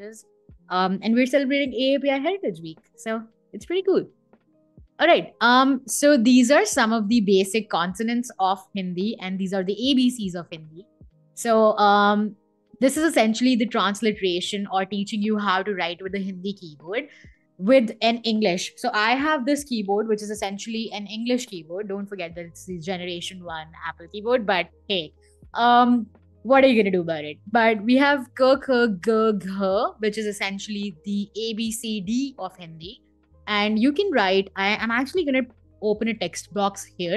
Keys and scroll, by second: 35.1 t.